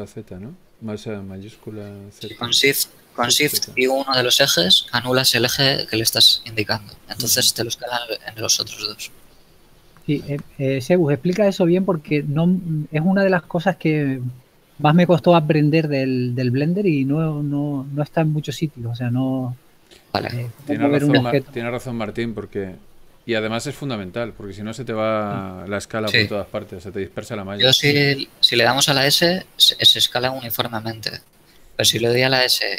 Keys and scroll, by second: 0.2 shift+z, 18.3 ctrl+space, 27.6 s, 32.3 s.